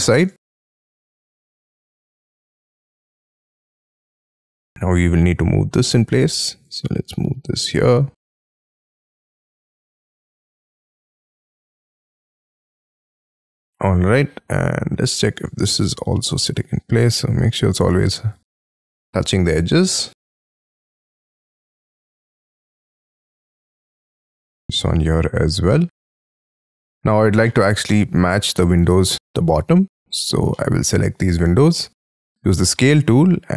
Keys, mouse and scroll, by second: 1.4 shift+click, 1.8 space, 1.9 middle click, 3.2 shift+middle click, 4.3 scroll up 4, 4.3 m, 5.5 scroll up 6, 9.4 shift+scroll up 6, 10.9 Right, 11.2 right click, 11.6 click, 11.9 right click, 12.6 scroll down 12, 13.1 middle click, 13.3 space, 13.5 scroll up 4, 13.7 middle click, 14.2-15.4 scroll up 17, 15.4 double click, 16.3 p, 17.7 scroll down 6, 17.8 space, 18.0 Escape, 18.6 Escape, 18.6 scroll down 5, 19.0 scroll up 6, 19.5 double click, 19.7 double click, 20.0 middle click, 20.9 double click, 21.1 double click, 21.5 scroll up 6, 22.0 p, 24.8-25.5 scroll down 16, 25.7 middle click, 26.2 space, 26.4 Escape, 26.7 Escape, 27.0-27.4 scroll down 8, 27.4 shift+middle click, 29.3 scroll up 5, 29.8 double click, 30.2 double click, 30.5 middle click, 31.1 middle click, 31.1-31.6 scroll up 12, 32.0 s.